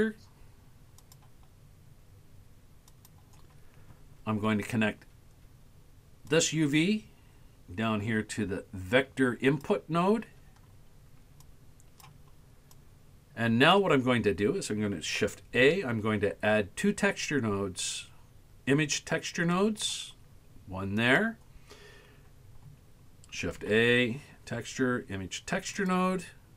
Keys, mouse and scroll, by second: 6.3-9.7 drag, 11.5 click, 12.8-13.9 drag, 15.6 shift+a, 23.6 shift+a.